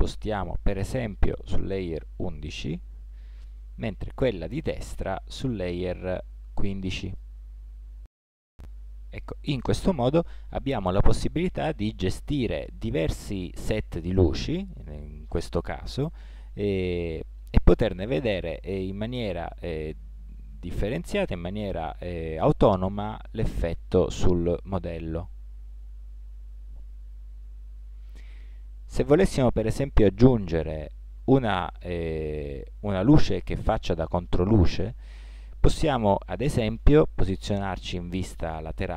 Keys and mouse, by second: 0.3 m, 4.3 right click, 5.1 m, 9.7-12.1 drag, 12.6-14.7 drag, 15.6 click, 16.6-19.6 drag, 36.8 KP_3.